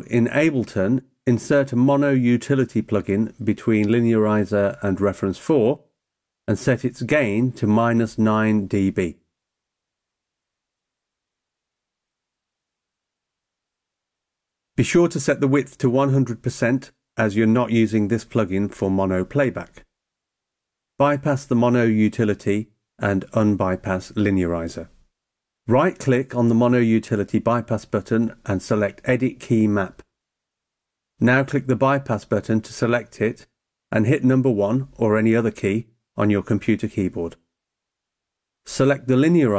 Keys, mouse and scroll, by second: 9.3 click, 15.9 click, 21.7 click, 26.0 right click, 30.1 click, 34.7 click, 36.6 click.